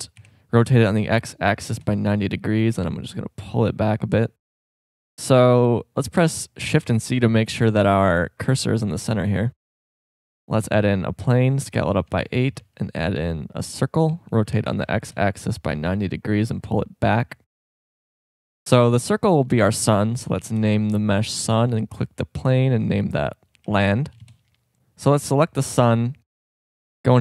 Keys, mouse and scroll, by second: 0.2 r, 3.2-3.8 drag, 5.1 shift+a, 6.8 shift+c, 7.6 shift+scroll up 1, 9.8 shift+a, 11.6 s, 12.6 shift+a, 14.1 r, 16.6 drag, 27.1 Tab.